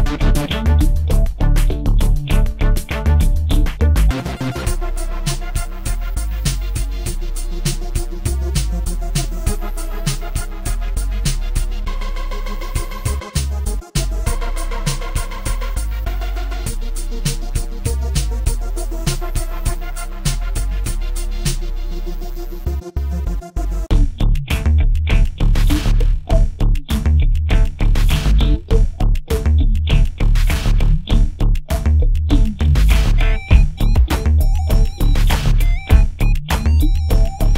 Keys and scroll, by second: 2.9 ctrl+c, 3.3 ctrl+f, 5.5 a, 7.5 space, 13.2 ctrl+f, 16.8 ctrl+c, 17.2 space, 17.6 ctrl+v, 28.3 space, 28.8 space, 35.4 space, 35.9 space.